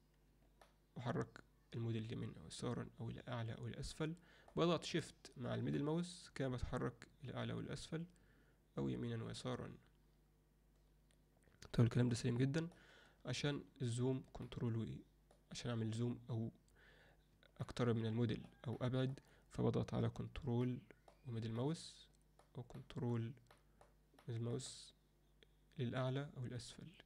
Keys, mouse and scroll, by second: 0.6-4.6 shift+middle drag, 5.8-12.8 shift+middle drag, 14.5-15.4 ctrl+middle drag, 17.7-18.5 ctrl+middle drag, 18.8-19.2 ctrl+middle drag, 20.6-21.1 ctrl+middle drag, 21.6-22.4 ctrl+middle drag, 22.8-23.2 ctrl+middle drag, 23.6 ctrl+middle drag, 24.2-24.6 ctrl+middle drag, 24.7-27.0 ctrl+middle drag.